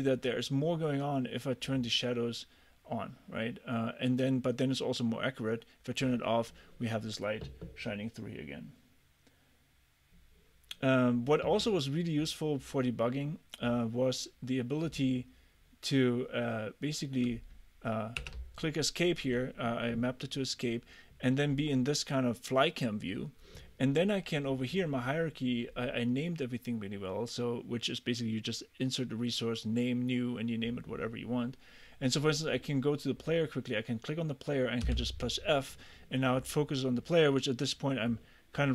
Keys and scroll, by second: 18.3 Escape, 34.9 f.